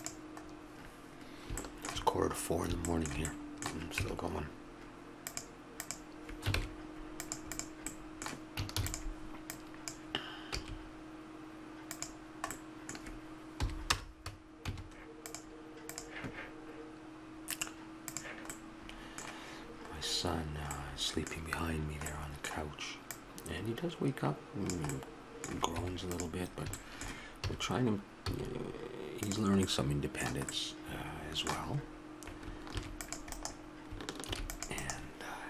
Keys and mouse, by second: 0.5-4.0 middle drag, 4.0 Tab, 6.6 ctrl+Tab, 8.8 shift+d, 10.6 s, 13.6 p, 14.7 Tab, 19.0 middle click, 21.0-23.1 middle drag, 23.1-24.9 drag, 24.9 middle click, 25.7 Tab, 27.5 a, 28.3 s, 32.7 ctrl+r.